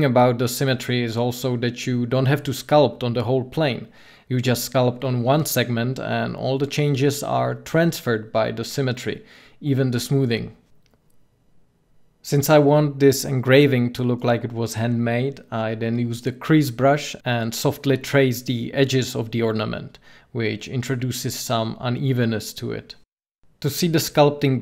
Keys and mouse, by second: 3.2 f, 6.0-9.9 drag, 11.7-15.4 drag, 16.0-20.5 drag, 23.2 n.